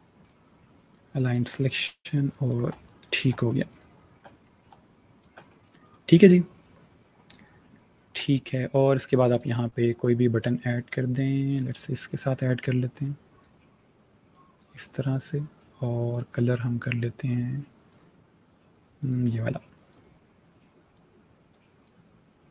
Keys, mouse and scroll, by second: 2.4 space, 2.5 click, 2.9 space, 3.4 click, 3.9 space, 4.5 click, 5.0 space, 5.7 click, 8.0 space, 9.3 right click, 11.5 click.